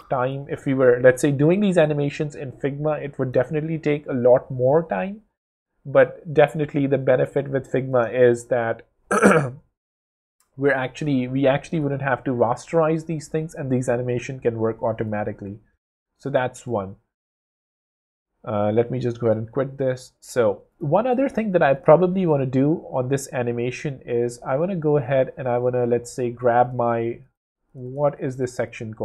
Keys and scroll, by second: 0.4 w.